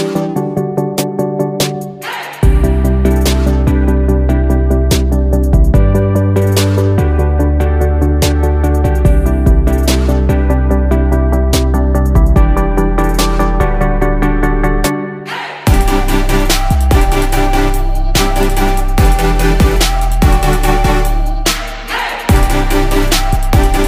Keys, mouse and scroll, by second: 0.3 ctrl+z, 1.2 ctrl+z, 20.6 right click.